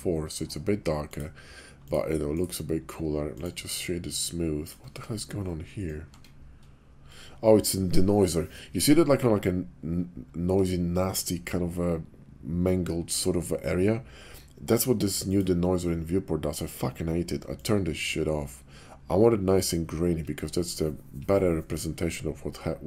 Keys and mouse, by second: 1.7 click, 2.6 click, 5.1 Tab, 6.2 Tab, 15.1 click, 17.5 click, 22.3-22.8 drag.